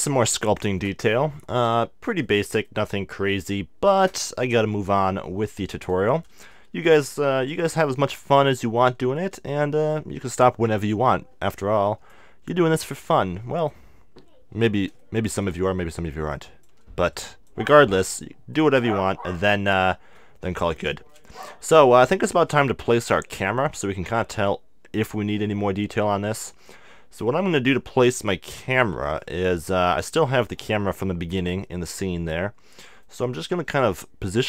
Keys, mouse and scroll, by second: 2.3-13.1 middle drag, 9.1-12.4 drag, 13.1-15.0 drag, 15.0-16.7 middle drag, 15.7-19.7 drag, 18.2 middle click, 18.4-34.4 middle drag.